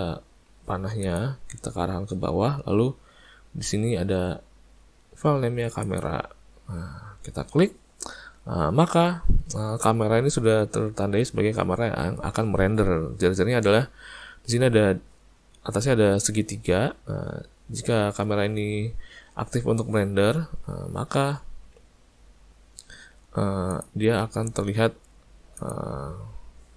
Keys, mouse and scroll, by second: 1.1 click, 5.9 click, 23.7 click, 25.6 click.